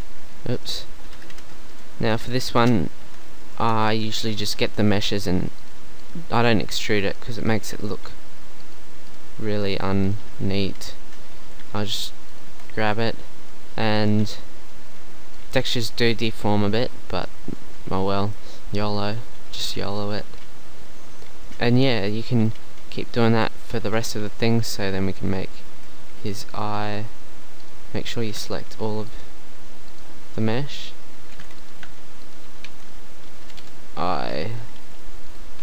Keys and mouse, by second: 0.6-2.3 drag, 1.4 Insert, 1.8 BackSpace, 3.6 Tab, 10.8 KP_1, 11.8 g, 12.5 Tab, 22.3 click, 24.6 Tab, 25.1 z, 25.8 z, 26.2 z, 28.4 ctrl+z, 31.4 ctrl+z, 32.7 z, 33.6 KP_1, 34.8 g.